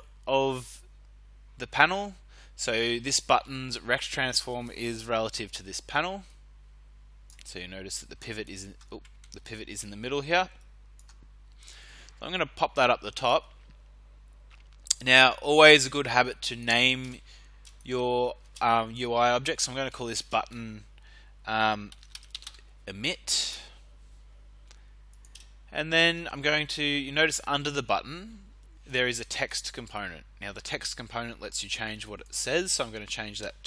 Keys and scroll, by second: 9.2 ctrl+z, 18.4 space, 19.9 -, 20.1 space, 21.6-22.9 typing, 23.4 Return, 33.5-33.6 typing.